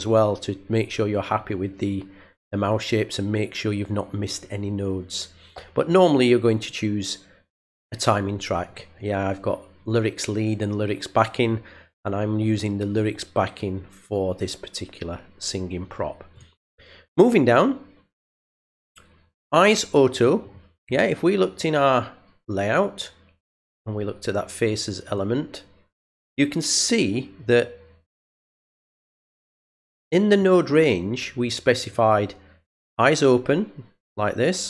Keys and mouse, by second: 0.0 click, 2.3 click, 5.9 click, 6.5 click, 8.6 click, 16.3 click, 18.7 click, 20.1 click, 22.4 click, 25.0 click, 28.1 click, 29.6 click, 31.8 click.